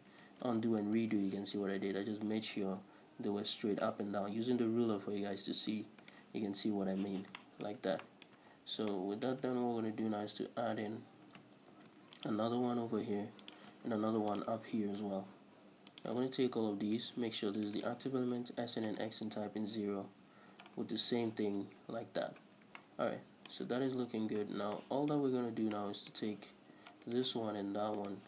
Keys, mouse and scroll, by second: 0.3 ctrl+shift+z, 1.0 ctrl+shift+z, 2.8 b, 5.7 middle click, 6.2 right click, 6.7-7.1 scroll up 1, 7.1 z, 7.4-13.6 shift+middle drag, 10.3-11.2 scroll down 2, 11.2-11.8 scroll up 2, 11.8 ctrl+r, 13.6 click, 14.1 ctrl+r, 16.1 shift+click, 16.9 alt+shift+right click, 17.6 shift+right click, 17.8 shift+right click, 18.6 s, 20.3 Return, 21.0 z, 21.4-22.7 scroll down 2, 22.7 scroll down 1, 22.9-27.2 shift+middle drag, 24.2-24.8 scroll up 2, 27.2 alt+right click, 28.1 alt+shift+right click.